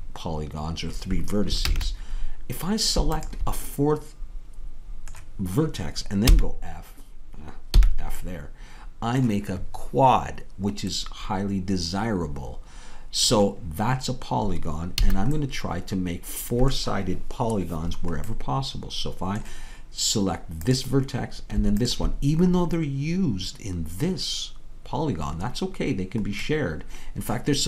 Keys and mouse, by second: 1.7 ctrl+z, 4.9 click, 6.3 f, 7.8 f, 15.1 a, 21.2-27.2 drag.